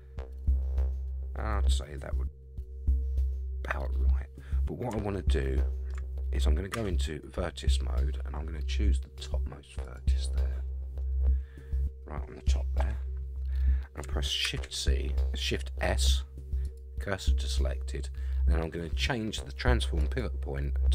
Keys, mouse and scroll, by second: 3.8-4.8 scroll up 2, 5.3 shift+middle click, 6.7 1, 7.9-8.7 scroll up 5, 9.8 click, 10.4-11.0 scroll down 4, 11.0-12.4 middle drag, 12.8 KP_3, 14.4 shift+s, 20.0-20.9 drag.